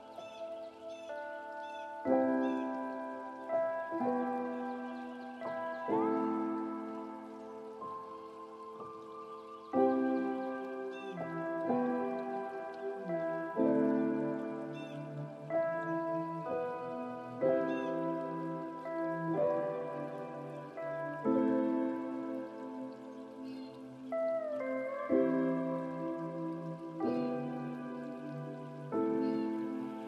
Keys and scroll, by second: 10.3 ctrl+space, 19.9 ctrl+;.